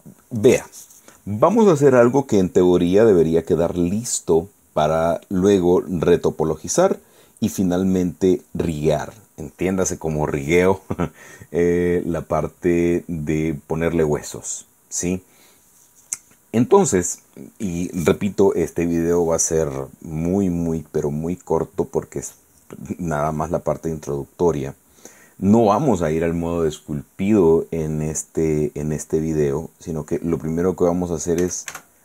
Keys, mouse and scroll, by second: 31.5 a.